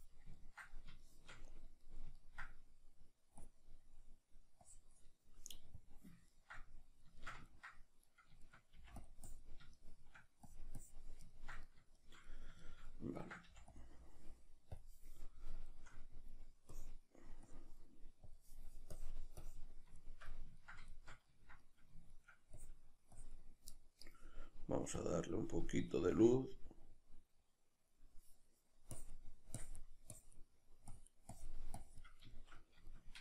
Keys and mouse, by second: 0.4-3.4 ctrl+middle drag, 3.4 click, 4.0 middle click, 4.6-6.3 drag, 6.3-9.1 ctrl+middle drag, 8.8 f, 9.1 click, 9.8 shift+middle click, 10.5 click, 11.4-13.8 ctrl+middle drag, 13.5 f, 13.8 click, 15.7-16.8 shift+middle drag, 16.8-20.0 drag, 20.0-22.6 shift+middle drag, 22.6-23.7 drag, 23.7-27.4 middle drag, 27.4 click, 32.3-33.2 shift+middle drag.